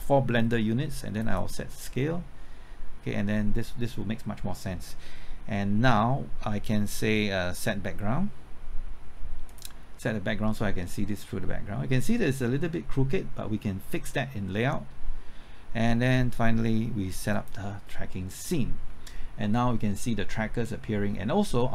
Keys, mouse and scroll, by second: 1.2 click, 5.5-8.9 scroll down 1, 9.5 click, 9.9 KP_Enter, 14.1 scroll up 1, 17.3-21.7 drag.